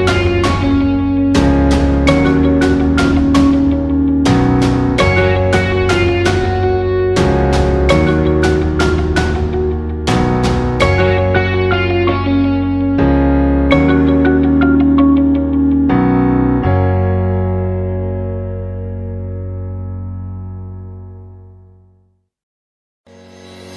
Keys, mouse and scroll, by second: 3.4 click, 7.1 click, 13.9 right click, 14.0 right click, 15.6 click.